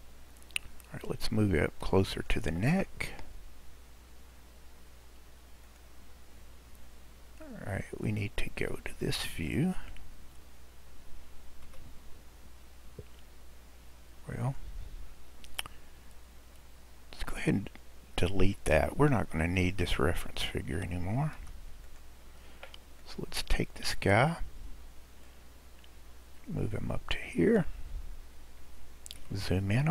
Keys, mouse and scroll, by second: 5.7 click, 8.2 click, 11.7 KP_Decimal, 12.4-13.0 scroll down 1, 13.0-14.4 scroll down 1, 14.4 click, 15.7-17.3 scroll down 3, 17.3 click, 21.4 x, 23.0 click, 25.2 click, 29.2 KP_Decimal, 29.4 click, 29.4 right click.